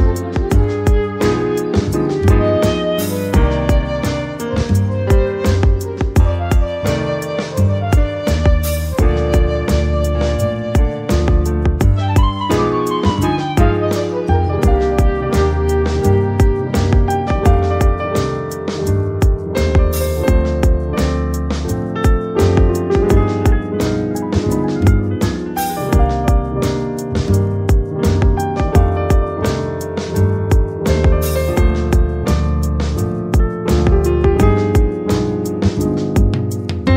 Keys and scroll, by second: 27.0 ctrl+z, 31.0 Up.